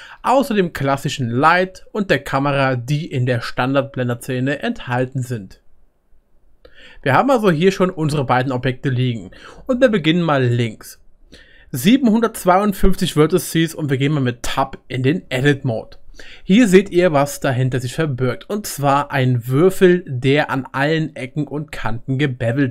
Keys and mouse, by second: 0.5 middle click, 6.9-10.5 middle drag, 10.5 click, 14.4-22.7 right drag, 14.5 Tab.